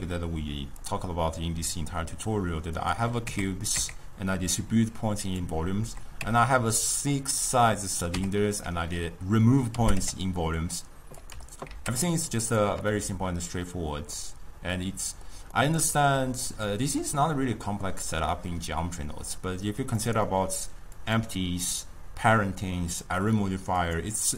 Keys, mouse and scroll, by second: 2.8 click, 3.3 Tab, 3.8 Tab, 5.3 click, 6.3 Tab, 6.8-8.2 middle drag, 8.2 Tab, 8.6-9.8 middle drag, 9.8 g, 11.3 g, 12.9-20.1 middle drag, 20.1 click, 21.0 click, 21.7 click, 23.8 click.